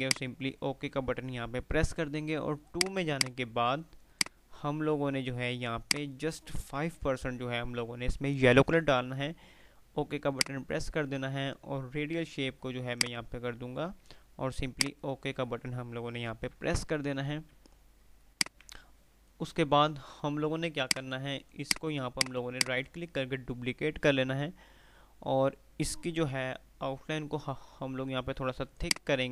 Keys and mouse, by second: 0.2 click, 2.8-6.5 drag, 10.3 click, 13.1 click, 16.9 F3, 17.6 click, 17.8 F2, 18.6-19.8 F2, 18.6 click, 20.9 click, 22.8 right click, 26.5 F12, 28.8 click.